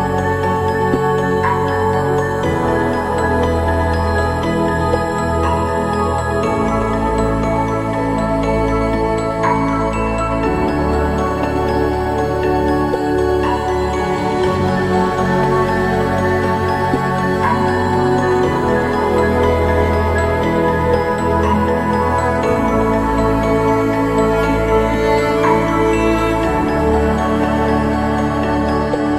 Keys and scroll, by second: 12.4 ctrl+0, 25.1 ctrl+=, 25.3 ctrl+=, 25.5 ctrl+=, 25.9 typing, 28.2 ctrl+=, 28.5 typing.